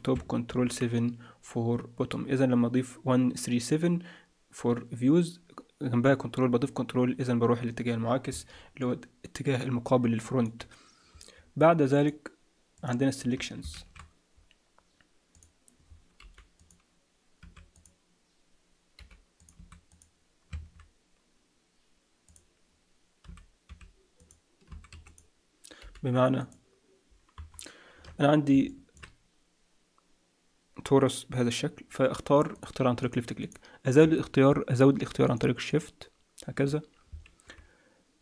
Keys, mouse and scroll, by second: 0.4 ctrl+KP_7, 8.8 middle click, 9.8 middle click, 11.9 click, 12.8 click, 13.2-13.7 scroll down 4, 13.7 shift+a, 16.2 g, 17.4 s, 18.9 g, 19.5 s, 20.6 shift+a, 23.2 s, 24.6 s, 25.8 g, 27.3 KP_Decimal, 27.9-28.5 scroll down 4, 28.6 shift+middle click, 31.8-32.5 scroll down 1, 32.5 click, 32.5-33.0 scroll down 1, 33.0 click, 35.2 shift+click, 35.6 shift+click.